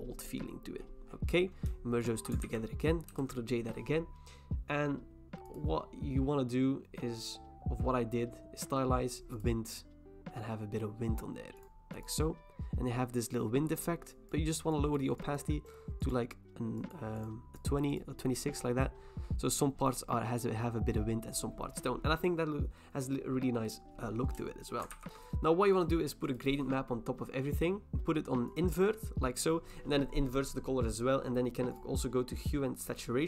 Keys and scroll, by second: 2.4 ctrl+e, 3.1 ctrl+j, 24.9 ctrl+e.